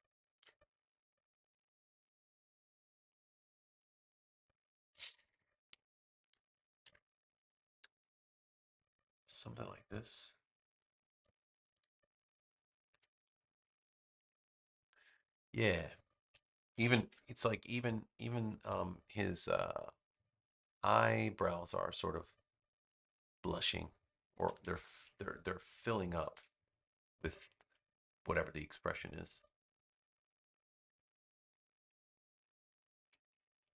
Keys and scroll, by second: 0.2 v, 6.7 BackSpace, 16.6 super+c, 16.9 super+v, 24.4 super+-, 26.0 super+=.